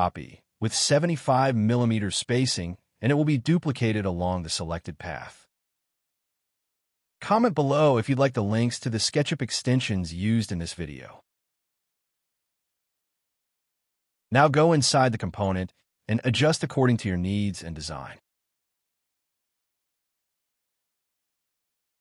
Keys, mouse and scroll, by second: 0.8-1.7 typing, 3.7-4.6 typing, 5.9 middle click, 6.7 space, 8.1 Delete, 8.3 middle click, 14.1 double click, 14.1-16.9 typing, 15.2 middle click, 17.3 click, 18.8 0, 18.9 Return, 18.9 click, 19.9 1, 20.0 Return, 20.2 middle click, 20.4 space, 20.5 Escape, 21.5 Delete, 21.6 middle click.